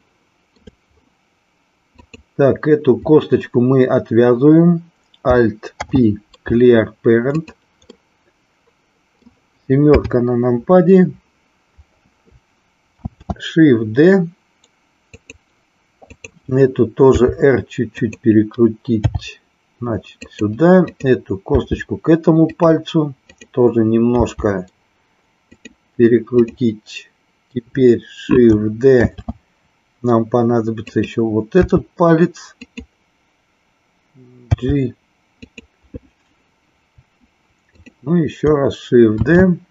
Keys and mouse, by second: 0.0 shift+middle click, 2.1 click, 5.7 alt+p, 7.9-9.3 middle drag, 9.8 KP_7, 13.1 shift+d, 15.2 click, 15.9 click, 16.9 r, 18.1 click, 19.1 g, 20.2 click, 20.9 click, 21.5 g, 22.6 click, 23.2 click, 25.6 click, 26.3 click, 28.9 shift+d, 30.9 click, 31.6 r, 32.7 click, 34.4 g, 37.7 click, 39.2 shift+d.